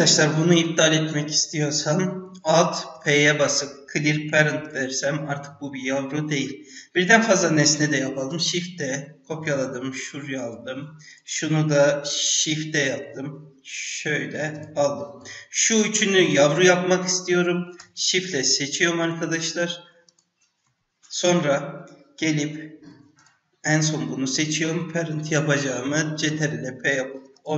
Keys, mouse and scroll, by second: 2.9 alt+p, 7.3 click, 8.3 shift+d, 11.0 click, 12.3 shift+d, 15.8 ctrl+click, 16.4 ctrl+click, 17.9 shift+click, 18.9 ctrl+shift+click, 20.0 shift+click, 23.1 shift+click, 26.3 ctrl+p.